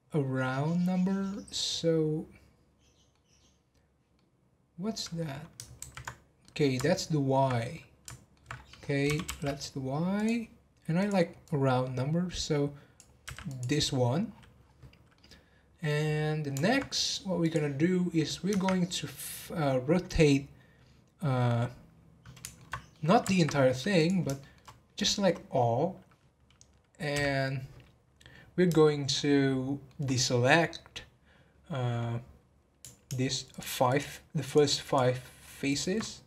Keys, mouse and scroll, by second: 5.8 ctrl+z, 6.4-7.5 middle drag, 7.5 scroll up 2, 7.7 middle click, 8.5-9.0 scroll up 5, 9.0 g, 11.0-13.6 drag, 14.3-14.7 scroll down 11, 15.1-17.4 middle drag, 17.4 click, 17.9 scroll up 3, 18.5 Tab, 22.3-23.9 middle drag, 23.9 click, 24.3 shift+middle click, 24.9 click, 28.1 scroll up 1, 28.8-31.9 shift+middle drag, 33.5 alt+shift+click, 33.9 alt+shift+click, 34.4 alt+shift+click, 34.8 alt+shift+click, 35.6 alt+shift+click, 36.0 scroll down 2.